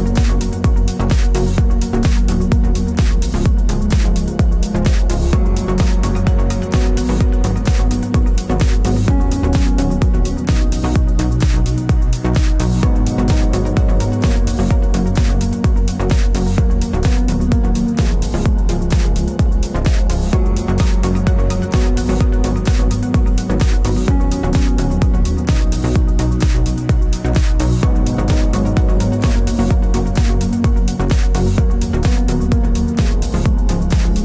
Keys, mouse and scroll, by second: 0.1 x, 0.3-1.4 middle drag, 0.6 scroll up 1, 1.1 2, 1.4 click, 1.8 middle click, 2.1 shift+click, 3.0-5.7 typing, 3.7 click, 4.2 middle click, 4.9-6.2 drag, 5.5 KP_Enter, 6.9-8.0 drag, 7.2 g, 8.1 middle click, 8.2-8.6 scroll down 2, 8.6 Tab, 8.8 z, 8.9 middle click, 9.1 drag, 9.2-15.3 middle drag, 9.3-9.8 scroll down 2, 9.8-13.3 scroll up 2, 13.8 scroll down 2, 14.0 KP_7, 14.4 z, 14.7-15.3 scroll up 2, 15.3 click, 15.7-18.3 scroll down 2, 18.3 Tab, 18.7-29.1 shift+middle drag, 28.8 z, 29.1 click, 29.5 3, 29.6 click, 31.9-34.2 middle drag, 32.2 z, 33.6 KP_7.